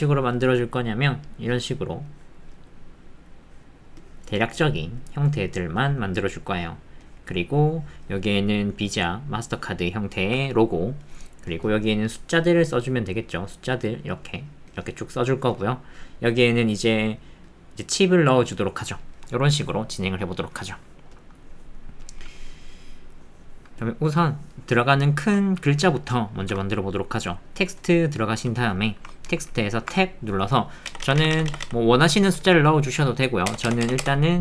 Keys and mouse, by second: 25.1 shift+click, 26.4 shift+a, 29.9 Tab, 30.9 BackSpace, 31.0 BackSpace, 33.5-34.4 typing.